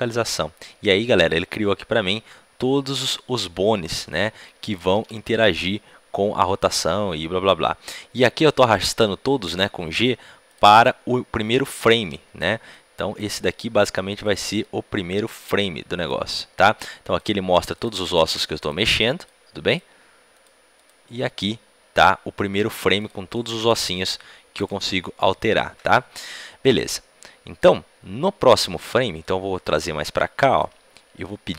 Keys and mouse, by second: 5.2 a, 5.2 g, 17.7-26.0 drag, 26.0-29.2 middle drag, 26.0 right click, 29.2-31.2 drag.